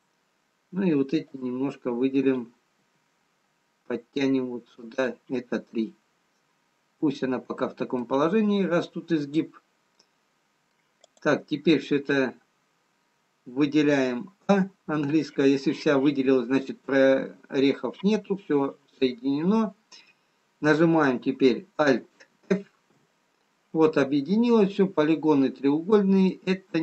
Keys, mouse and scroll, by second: 1.8 click, 3.2 g, 6.2 middle click, 10.3 scroll up 1, 11.2 middle click, 12.7 click, 15.0 a, 23.2 alt+f, 26.1-26.8 scroll up 1.